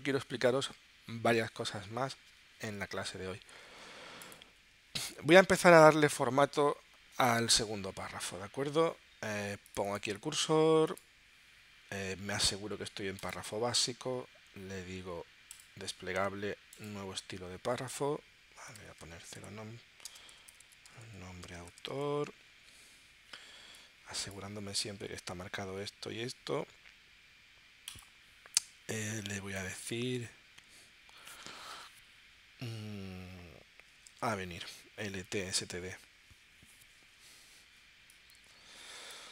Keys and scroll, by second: 20.1 space, 34.0 a, 35.2 Tab.